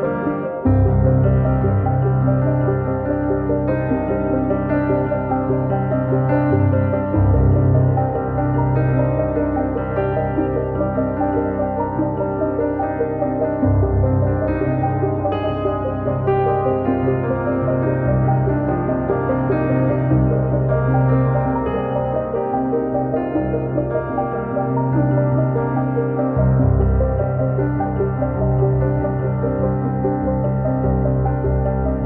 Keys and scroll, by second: 15.6 Return, 16.2 Escape, 19.5 r, 21.4 space, 21.7 p, 25.4 space, 26.8 Right, 28.1 space, 31.4 Return.